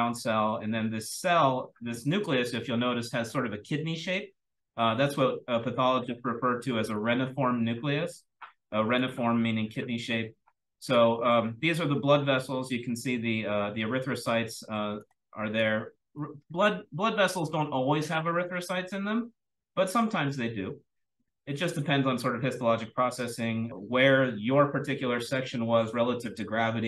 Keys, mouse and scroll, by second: 4.2-5.6 scroll down 1, 5.6-6.5 scroll down 1, 6.5-9.0 scroll down 1, 6.8-9.0 drag, 9.0-11.8 scroll down 1, 9.2-10.9 drag, 11.8-13.8 scroll down 1, 13.8-14.6 scroll down 1, 14.6-17.4 scroll down 1, 15.2-15.6 drag, 16.1-16.5 drag, 16.9-17.4 drag, 17.4-19.2 scroll down 1, 19.2 scroll down 1, 19.4-22.6 scroll up 1, 22.6-26.8 scroll up 1.